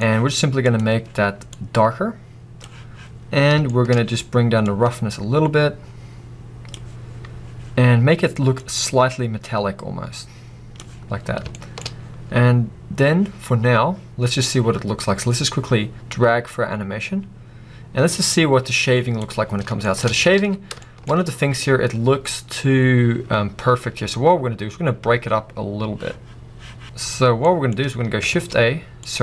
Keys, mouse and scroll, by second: 1.5-3.2 drag, 1.5-3.2 right drag, 3.2-3.7 scroll up 2, 3.7 shift+middle click, 4.0-4.7 scroll up 2, 4.7-6.4 drag, 11.1-11.6 scroll down 2, 11.6-12.0 shift+middle drag, 12.0-13.1 scroll down 2, 13.1 scroll down 1, 13.4-14.0 scroll up 2, 14.0-14.8 scroll up 1, 16.3-19.5 drag, 19.5-19.9 scroll down 2, 19.9-20.2 shift+middle drag, 20.2 scroll up 2, 20.4 alt+a, 20.9 shift+middle drag, 21.1-21.9 scroll up 2.